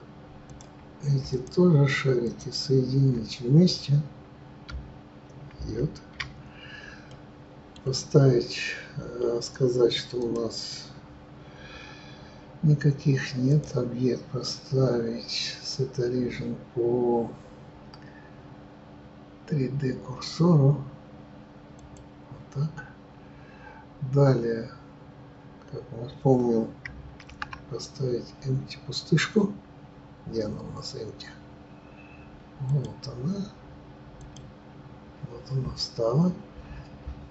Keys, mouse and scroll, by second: 0.4 click, 2.1 shift+click, 5.5 ctrl+j, 7.1-10.2 middle drag, 10.2-22.0 drag, 29.1 shift+a.